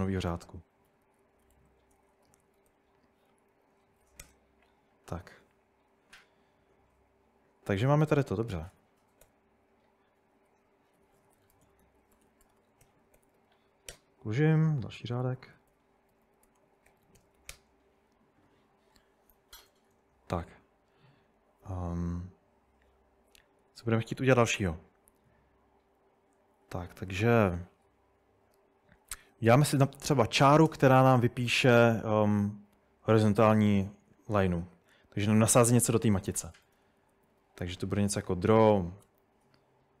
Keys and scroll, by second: 0.6-4.1 typing, 4.2 Return, 8.1-9.8 typing, 11.0-17.9 typing, 13.9 Return, 23.6-24.1 typing, 26.4-27.7 typing, 29.3 typing, 30.7 Return, 36.1-40.0 typing.